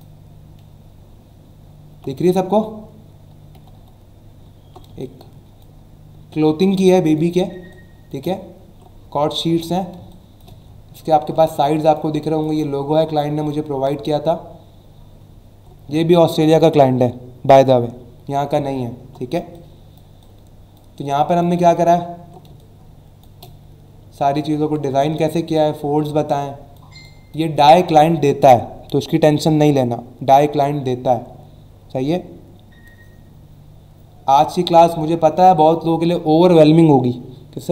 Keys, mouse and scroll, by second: 1.2 alt+scroll down 1, 2.3 alt+scroll up 1, 3.5 typing, 4.6 alt+scroll up 1, 4.9 space, 5.0 click, 5.4 space, 6.8 click, 6.9 space, 7.7 click, 7.8 space, 8.7 alt+scroll up 1, 9.4 alt+scroll down 1, 10.0 space, 10.1 click, 10.7-11.1 alt+scroll up 2, 11.5 space, 11.6 click, 11.9 space, 12.2 click, 12.3 space, 12.9 alt+scroll up 1, 13.3 click, 15.3 alt+scroll down 1, 18.8 alt+scroll down 1, 19.3 space, 19.5 click, 19.8 space, 20.2 click, 20.3 space, 21.0 click, 21.1 space, 21.8 alt+scroll up 1, 22.4 space, 22.5 click, 22.9 space, 24.1 alt+scroll down 1, 26.0 space, 26.3 click, 26.5 space, 27.0 click.